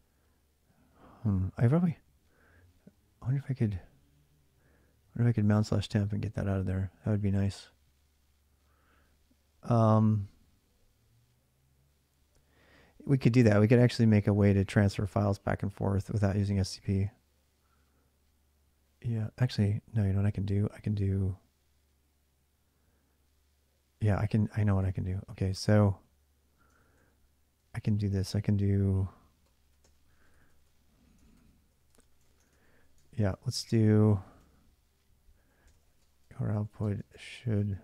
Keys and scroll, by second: 24.0 j, 24.6 Return, 25.6 ctrl+a, 25.7 ctrl+a, 26.5 ctrl+[, 26.6 ctrl+j, 26.8-37.8 typing, 31.0 ctrl+[, 31.7 Return, 31.8 Return, 32.0 ctrl+[.